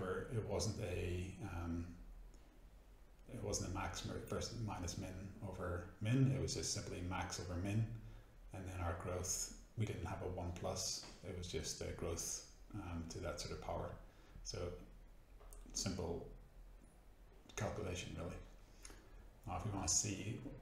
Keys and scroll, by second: 0.9 Delete, 6.8 BackSpace, 12.1 Return, 15.6 F9.